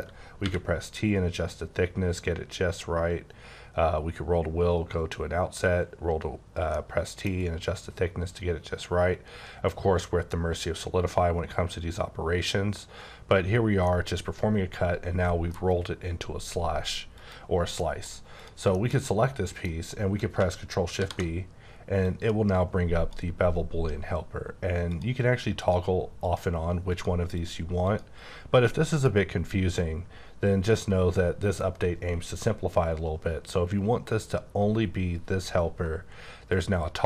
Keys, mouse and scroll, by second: 0.4 t, 3.9 scroll up 1, 6.7 middle click, 9.1 scroll up 1, 9.6-10.2 scroll up 1, 10.2-11.4 scroll up 1, 11.4-12.5 scroll up 2, 12.5-13.8 scroll up 1, 13.8 middle click, 17.2 click, 17.8 middle click, 18.4 click, 18.7 middle click, 19.0 double middle click, 19.7 scroll up 3, 20.2 scroll down 1, 21.0 shift+b, 22.0 click, 24.9 click, 25.6 click, 26.2 click, 26.9 click, 27.8 click, 36.5 click.